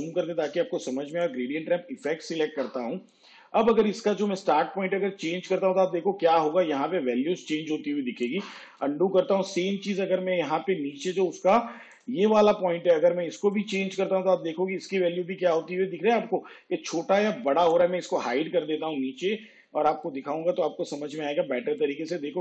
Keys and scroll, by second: 2.2 space, 8.7 ctrl+z, 10.8 space.